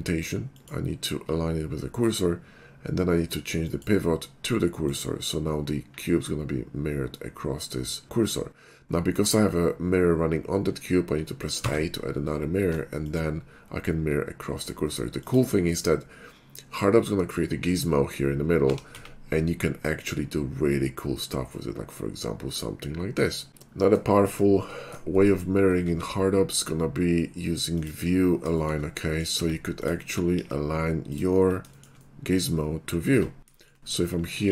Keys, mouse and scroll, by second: 0.6 click, 3.6 click, 4.9 click, 11.6 a, 13.0 click, 15.2 click, 15.9-18.2 middle drag, 18.7 r, 19.0 z, 23.3 scroll up 12, 24.2 shift+middle click, 25.0 shift+2, 25.9 shift+a, 27.8 click, 28.2-28.7 middle drag, 29.4 Tab, 29.8 click, 30.4 ctrl+b, 31.1 click, 31.8 shift+middle click, 32.0 middle click, 33.2 Tab, 33.6 shift+middle click.